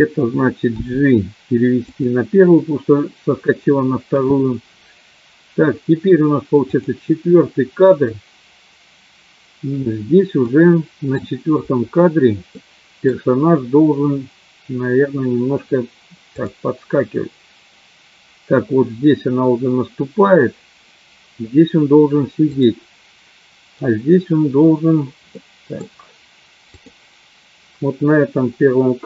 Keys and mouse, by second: 0.7 g, 7.1 click, 10.5 middle click, 12.6 middle click, 16.8 click, 23.0 click, 25.5 middle click, 27.2 click.